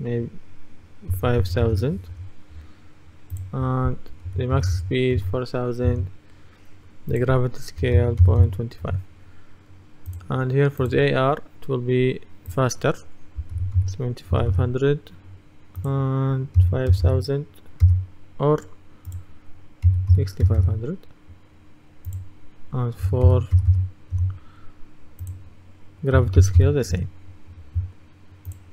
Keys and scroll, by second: 1.2 KP_0, 2.2 Return, 4.3 KP_4, 5.9 Return, 7.9 KP_0, 8.0 KP_Decimal, 8.3 KP_2, 8.9 Return, 13.6 KP_7, 13.8 KP_5, 16.7 KP_5, 17.0 KP_0, 19.9 KP_6, 23.1 KP_4, 24.2 Return, 26.2 KP_Decimal, 26.5 KP_2, 27.0 Return.